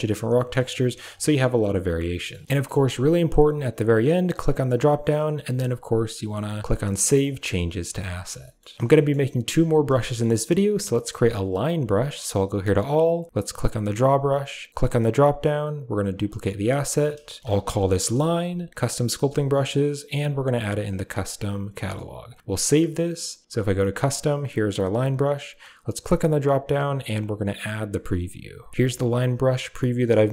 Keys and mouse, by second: 0.3 middle click, 0.7 click, 1.3-2.3 middle drag, 4.3-7.2 drag, 8.1 middle click, 8.5 shift+middle click, 8.8 shift+middle click, 10.1 shift+middle click, 12.1 click, 13.5 click, 14.8-22.4 drag, 23.7 click, 25.8-28.7 drag.